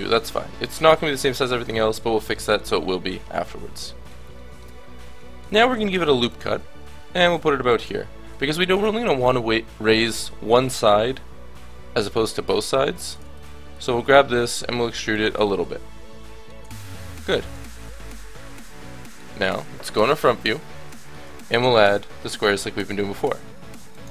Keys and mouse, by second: 5.9 ctrl+r, 7.7 click, 11.7-13.0 middle drag, 13.0-14.5 drag, 14.5 e, 15.3 Tab, 16.6 Tab, 17.6 a, 20.1 KP_1, 21.5 click, 21.7 shift+a, 22.8 s.